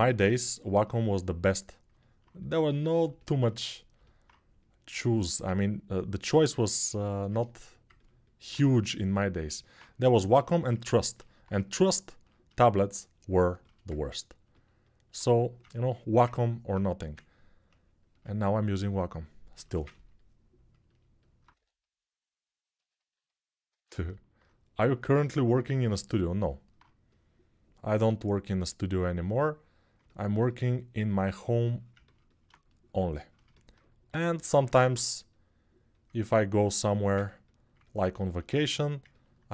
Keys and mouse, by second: 16.6 1, 20.5-23.5 ctrl+alt+right drag, 21.3 3, 23.5-25.4 alt+shift+drag, 30.1-33.5 drag, 33.5-37.2 right drag, 33.8 g, 37.2 alt+click, 37.8-39.5 alt+shift+right drag.